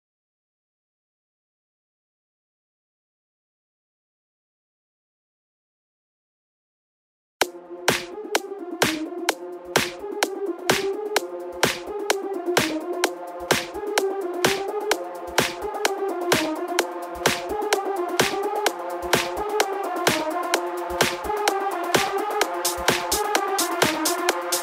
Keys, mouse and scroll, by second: 3.3 x, 6.9 click, 7.8 a, 10.5 ctrl+a, 15.6-17.9 drag, 17.9-18.4 scroll up 1, 18.8-20.1 middle drag, 20.1 ctrl+z, 20.5 ctrl+z, 21.7 click, 22.2 scroll down 1, 23.1-24.6 drag.